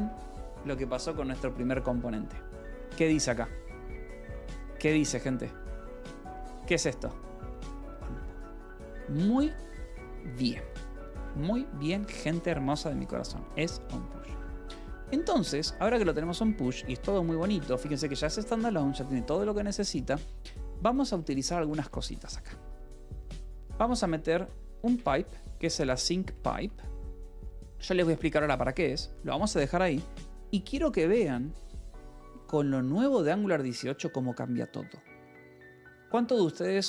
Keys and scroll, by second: 3.8 Escape, 5.9-6.7 typing, 8.7 Escape, 11.7-12.9 typing, 14.6 j, 15.3 k, 18.3 Escape, 19.6 j, 20.7-31.8 typing, 27.1 Escape, 32.1 Escape, 33.4 a, 33.8 Tab.